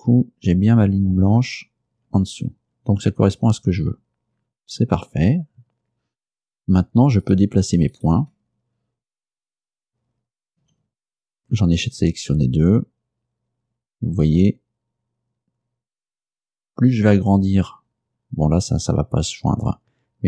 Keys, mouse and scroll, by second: 2.8-3.2 scroll down 2, 3.8-4.1 scroll down 2, 4.4 scroll up 2, 7.3 right click, 7.6-8.8 scroll up 2, 8.0 shift+right click, 10.7 g, 11.3 x.